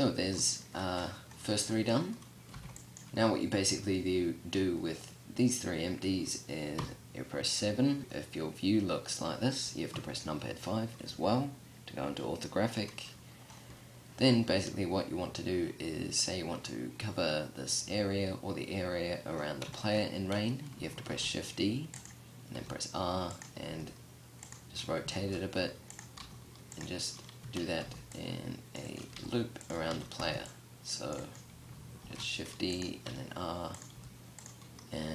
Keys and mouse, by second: 1.9 b, 6.2 KP_7, 7.9 KP_5, 9.4 KP_5, 20.5 shift+d, 21.5-22.0 drag, 22.0 r, 23.1 g, 24.6 shift+d, 25.6 r, 26.8 a, 27.3 c, 28.6 g, 29.3 a, 29.6 c, 31.4 shift+d, 32.2 click, 32.5 r, 33.4 g.